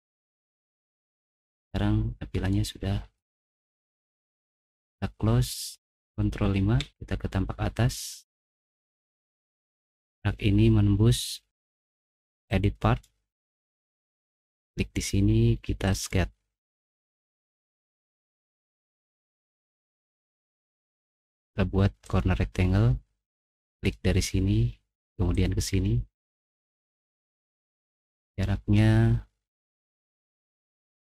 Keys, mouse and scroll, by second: 0.1-1.5 drag, 1.6 click, 2.5-3.7 middle drag, 5.9 click, 6.8 ctrl+5, 8.1 middle click, 8.7-9.3 scroll up 2, 10.2-11.5 drag, 12.6 click, 14.4 click, 15.8 click, 17.1 middle click, 17.6 middle click, 17.9 middle click, 18.4 middle click, 21.1 click, 22.0 click, 23.7 click, 25.7 click, 26.8 click, 28.2 click, 29.5 click, 30.3 click.